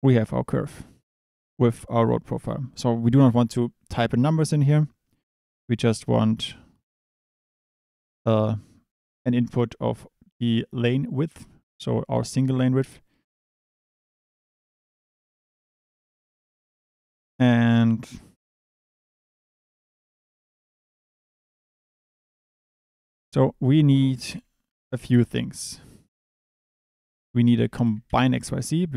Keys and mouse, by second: 2.2 click, 2.7 click, 11.1 click, 11.8 click, 21.1 click, 22.5 shift+a.